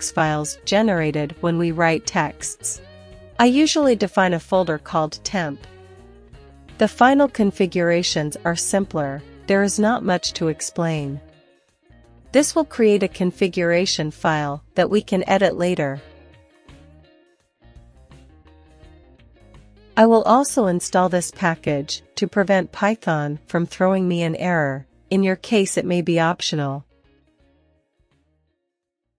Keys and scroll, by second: 6.7 Return, 7.3-9.7 typing, 10.2 Return, 10.8-11.6 typing, 12.1 Return, 12.3 ctrl+l, 13.3-15.7 typing, 15.8 Return, 16.7 typing, 16.9 Page_Down, 17.4 Page_Down, 17.5-18.0 Page_Down, 18.9 typing, 20.3 super+c, 21.5-23.9 typing, 25.1 Return.